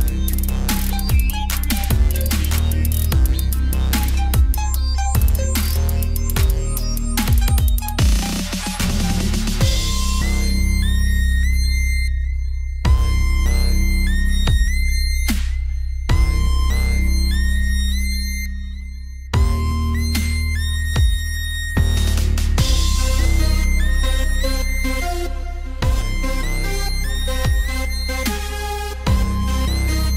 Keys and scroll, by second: 15.4 ctrl+d, 17.6 ctrl+z, 19.4 ctrl+j, 22.9 ctrl+g.